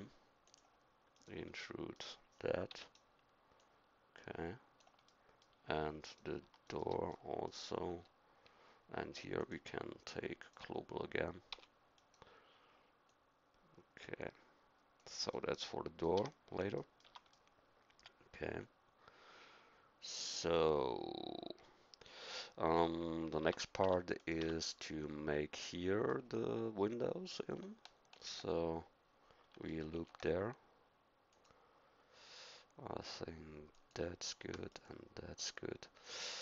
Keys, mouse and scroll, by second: 1.6-2.7 middle drag, 2.7 e, 5.2 middle click, 7.1-8.4 middle drag, 11.5 e, 16.2 a, 17.1 Tab, 22.8 middle click, 23.4 Tab, 23.8 Tab, 24.4 Tab, 24.9-27.6 middle drag, 28.1 ctrl+e, 29.9 ctrl+r, 34.2 ctrl+r.